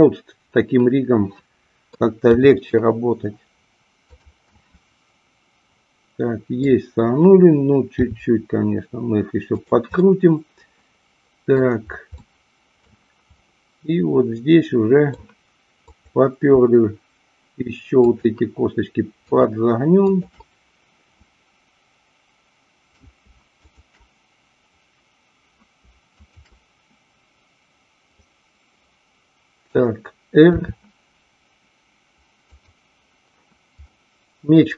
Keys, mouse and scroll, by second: 0.1-2.0 middle drag, 2.4 r, 4.1 click, 4.5-6.6 middle drag, 8.0 r, 9.6 click, 10.0-11.6 middle drag, 12.1-12.9 middle drag, 13.4-15.1 middle drag, 15.7-17.1 drag, 18.0-19.5 shift+drag, 21.7-23.0 middle drag, 23.6-24.9 shift+drag, 26.3-27.6 shift+drag, 28.3-29.7 middle drag, 30.5 r, 32.6 click, 33.9-34.7 middle drag.